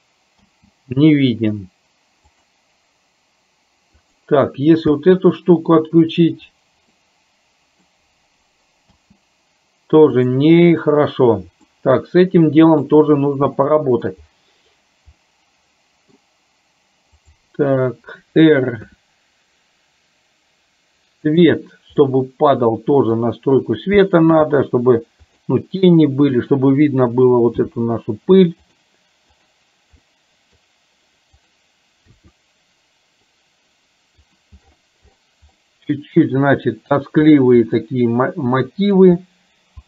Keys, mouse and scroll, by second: 0.5 space, 2.6 click, 5.1 space, 7.1 middle click, 9.2 space, 11.8 middle click, 13.7 middle click, 15.2 middle click, 17.3 click, 19.0 r, 22.2-23.4 middle drag, 24.6 g, 26.4 click, 27.9 g, 29.6 click, 30.1 middle click, 31.5 click, 32.4 r, 35.8-37.1 middle drag, 37.9-39.1 middle drag.